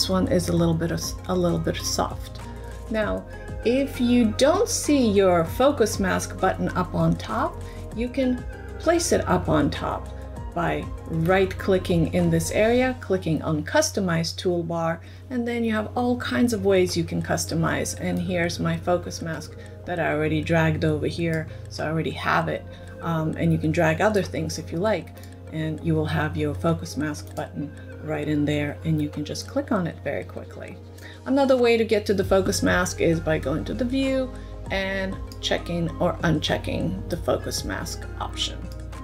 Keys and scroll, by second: 38.7 super+<, 38.7 f.